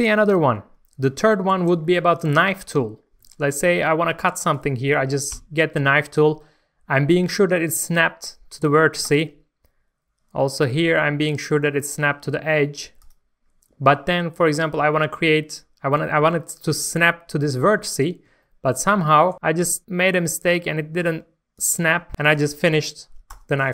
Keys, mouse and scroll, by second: 1.3 scroll up 1, 1.5 Tab, 1.8 shift+middle click, 2.9 scroll up 1, 3.3 shift+middle click, 5.3 k, 9.0-14.0 drag, 17.1-17.7 scroll up 1, 18.4 shift+middle click, 21.5 click, 23.3 Return.